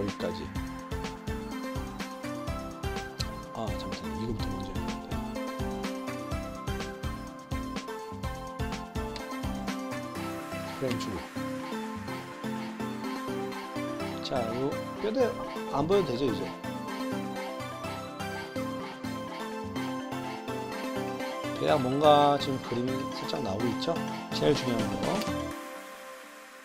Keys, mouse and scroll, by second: 3.2-5.3 drag, 6.8 g, 9.1 i, 10.1 drag, 10.7 click, 10.9 space, 11.8-12.2 middle drag, 16.1 click, 17.3-17.9 middle drag, 19.1 middle click, 22.8 click, 23.9 click, 24.3 click, 25.2 space, 26.4 drag.